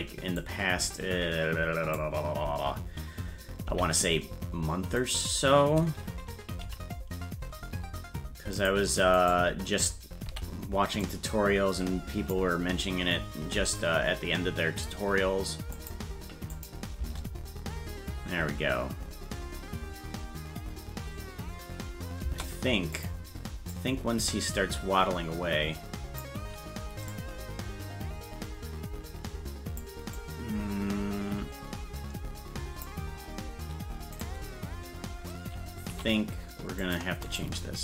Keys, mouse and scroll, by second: 9.2 right click, 10.3 b, 13.5 g, 16.5 click, 17.0 space, 23.0 click, 23.7-26.2 drag, 27.1-29.8 drag, 30.2-32.8 drag, 34.1 right click, 35.9 c.